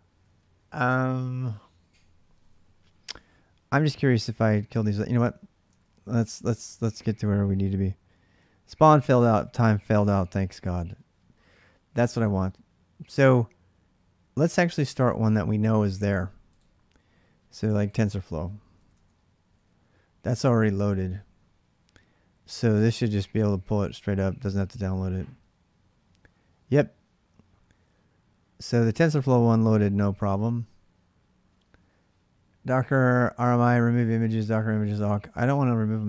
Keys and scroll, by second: 0.0-5.9 typing, 18.3-20.7 typing.